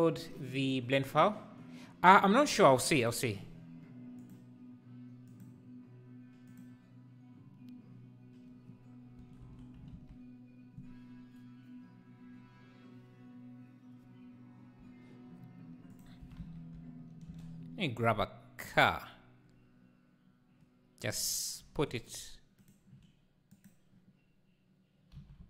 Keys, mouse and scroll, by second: 4.2 click, 10.0 alt+a, 17.5-21.7 drag, 22.1-23.0 shift+right drag, 23.5-25.2 drag, 25.2 g.